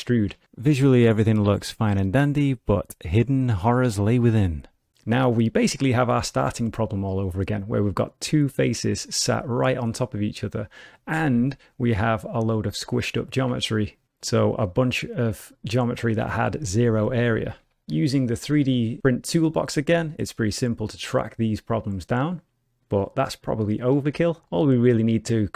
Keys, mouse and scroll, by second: 0.4 shift+middle click, 0.8 middle click, 4.8 middle click, 5.8 middle click, 8.7 middle click, 9.6 g, 12.2 alt+click, 16.5 ctrl+z, 17.2 ctrl+z, 17.9 n, 18.5 middle click, 19.0 shift+middle click, 19.3 middle click, 20.1 click, 24.0 middle click, 24.4-25.4 scroll down 1, 25.4 middle click.